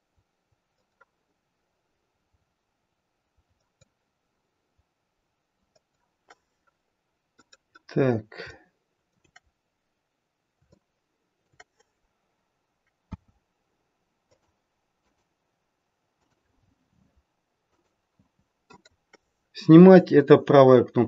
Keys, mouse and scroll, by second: 8.4 shift+middle click, 9.7-10.2 scroll up 1, 10.6 shift+middle click, 13.0 c, 19.3-20.2 scroll down 3.